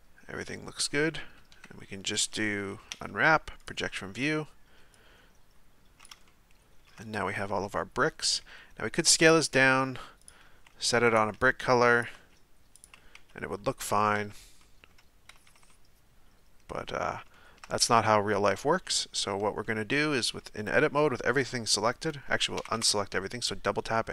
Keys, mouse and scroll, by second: 1.5 KP_1, 3.7 u, 5.1-8.0 drag, 8.0 s, 9.4 g, 10.5 s, 11.3 g, 12.1 s, 13.6 z, 14.2 Tab, 14.6-15.3 middle drag, 15.3 a, 15.4 a, 15.7-17.0 middle drag, 17.0-17.3 scroll up 1, 17.3-17.9 shift+middle drag, 17.9 Tab, 19.6-22.6 middle drag, 22.6 a, 22.7 a.